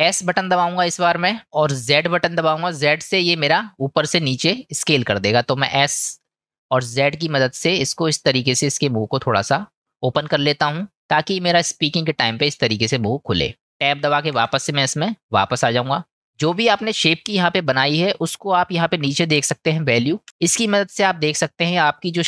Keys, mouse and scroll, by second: 9.5-10.7 drag, 10.9-12.0 middle drag, 14.4 Tab, 15.4-20.0 middle drag.